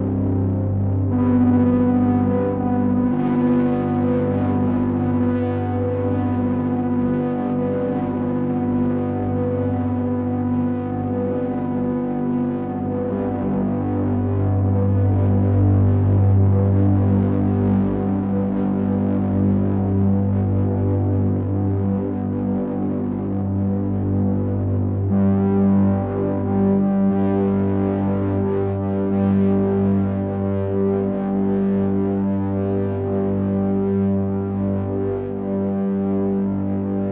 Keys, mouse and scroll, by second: 5.2-6.9 scroll up 3, 6.9 click, 9.8 shift+click, 12.7 KP_3, 15.2 e, 19.9 middle click, 24.1 click, 28.3 e.